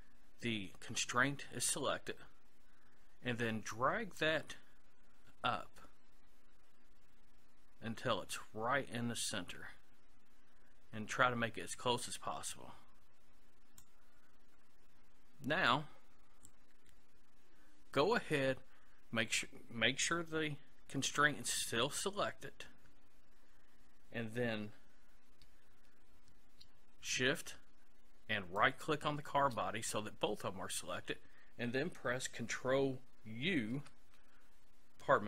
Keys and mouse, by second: 4.2-6.0 drag, 28.6-31.3 right drag, 33.7 ctrl+u.